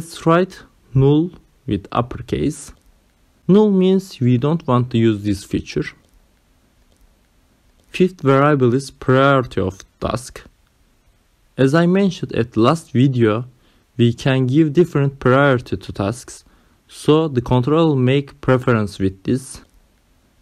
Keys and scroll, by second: 2.3 shift+n, 2.7 shift+l, 3.7 space, 9.1 ,, 9.9 space.